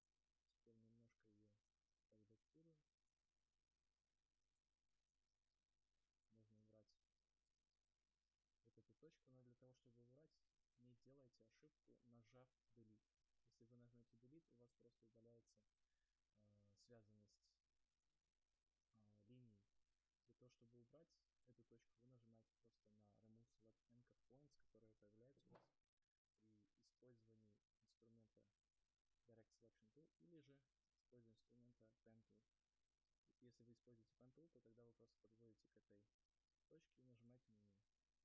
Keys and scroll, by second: 6.9 Return, 13.4 Delete, 14.3 ctrl+z.